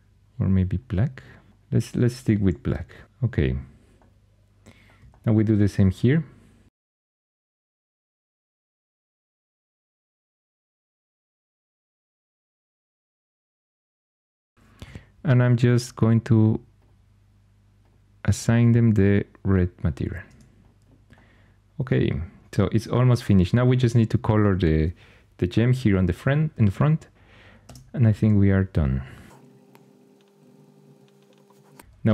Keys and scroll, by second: 10.6 super+l, 11.9 Tab, 12.4-13.1 typing, 20.1 Tab, 27.5 Tab, 29.2-32.1 typing.